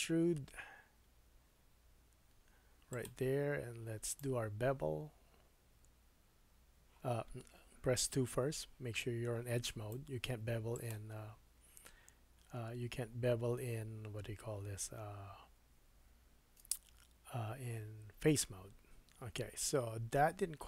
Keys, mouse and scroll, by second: 0.4-4.0 middle drag, 4.0-20.6 right drag, 8.3 2.